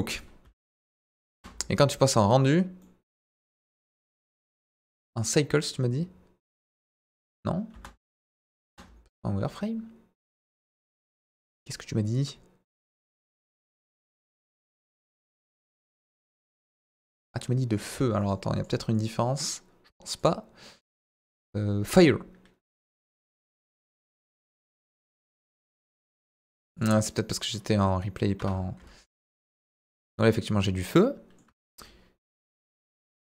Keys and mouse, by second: 0.4 space, 1.3 space, 2.1 click, 2.8-4.1 middle drag, 4.8 drag, 5.1-5.8 drag, 7.7 space, 8.6 space, 10.7 click, 15.3 click, 16.0 click, 18.6 click, 18.9 click, 20.2-22.0 drag, 22.8 click, 25.6-26.2 drag, 26.8-28.4 drag, 29.3-30.6 drag, 30.9 middle click, 32.4 click, 32.9 middle click.